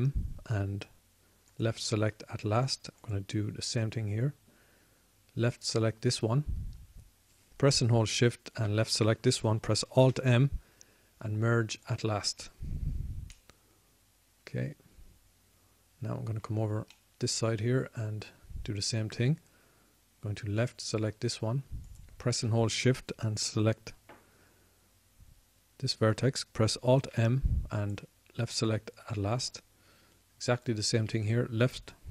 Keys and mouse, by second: 1.2 alt+m, 3.4 alt+m, 6.7-11.7 drag, 11.7 alt+m, 15.4 click, 15.5-17.0 middle drag, 18.7-29.9 drag, 28.8 alt+m, 29.9 alt+m, 31.2-32.1 drag.